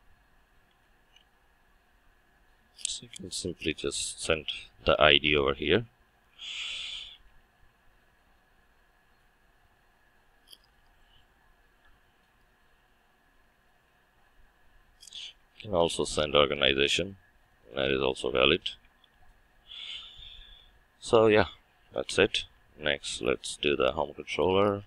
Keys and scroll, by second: 1.2 Return, 10.9 Return, 15.5 ctrl+z, 18.5 ctrl+c.